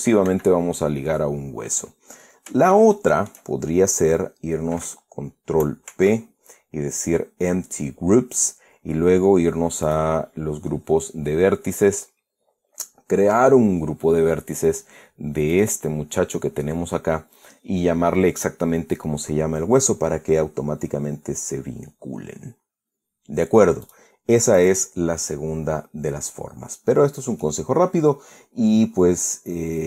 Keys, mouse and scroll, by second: 0.9 Escape, 3.4-4.1 shift+drag, 6.5 ctrl+p, 10.5 click, 16.2 click, 24.5 click, 25.2 right click, 27.0-27.4 scroll down 1, 28.1-29.8 middle drag.